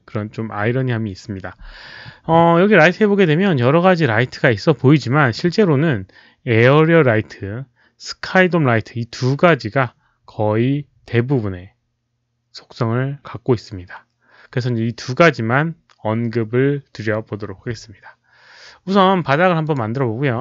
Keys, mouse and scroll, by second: 19.6 click, 20.3 r.